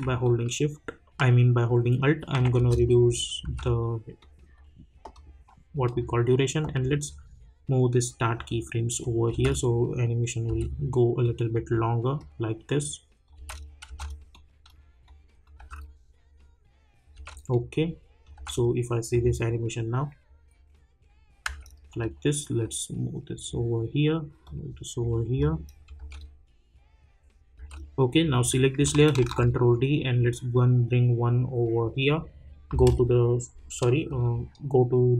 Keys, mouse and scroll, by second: 2.5 space, 4.2-9.0 drag, 9.3 space, 11.2 click, 13.3 space, 14.3 click, 15.6 space, 17.5 click, 18.3 space, 21.4 space, 21.9-26.0 drag, 26.0 space, 28.2 click, 29.2 ctrl+d, 29.7-32.9 drag.